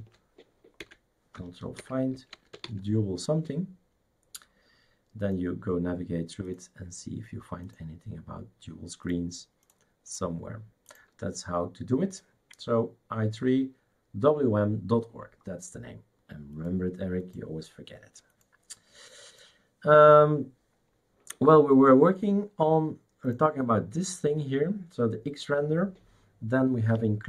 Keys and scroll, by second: 0.8 Escape, 1.8 ctrl+f, 2.1-3.1 typing.